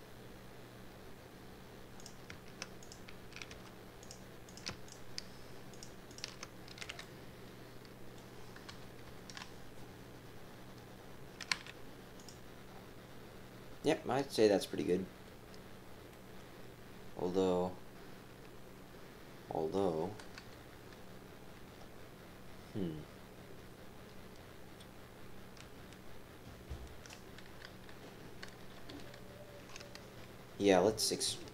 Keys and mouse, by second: 2.8 click, 3.5 g, 4.5 click, 5.7 shift+click, 6.1 shift+click, 6.8 f, 7.0-8.1 drag, 8.7 KP_3, 9.1 KP_1, 11.5 z, 16.1 middle click, 17.1-19.7 right drag, 20.4 KP_3, 20.8 KP_1, 27.9 KP_2, 28.9 KP_3.